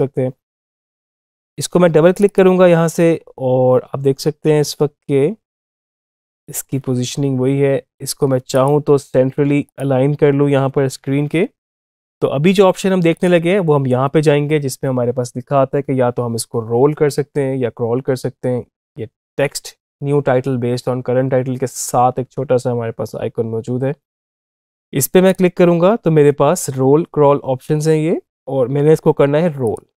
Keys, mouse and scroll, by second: 0.5 ctrl+z, 1.0 click, 5.6-8.4 drag, 13.0 click, 25.1 click, 29.4 click.